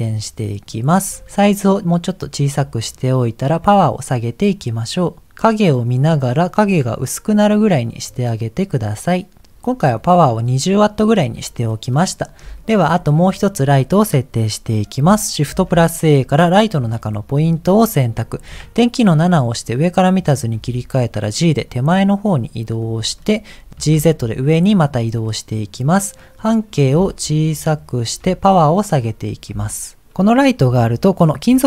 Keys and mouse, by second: 1.3-2.9 drag, 3.6-9.5 drag, 11.8 middle click, 12.8 shift+middle click, 15.5 shift+a, 18.5 KP_7, 20.5 g, 23.2 middle click, 23.8 g, 26.2 click, 27.0-28.1 shift+drag, 28.5 click, 29.8 shift+click.